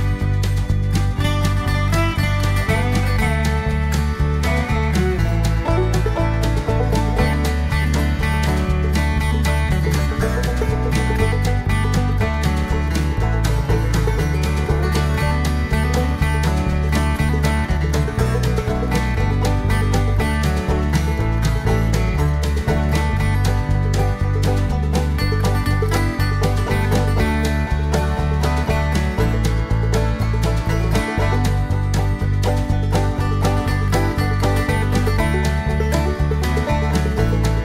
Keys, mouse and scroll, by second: 3.9 click, 8.2 click, 9.1 0, 10.3 click, 15.3 click, 16.3 click, 17.5 click, 18.2 click, 19.7 click, 21.5 click, 23.4 click, 25.3 click, 26.8 click, 27.7 click, 29.6 click, 31.7 click, 33.5 click, 35.4 click, 36.8 click.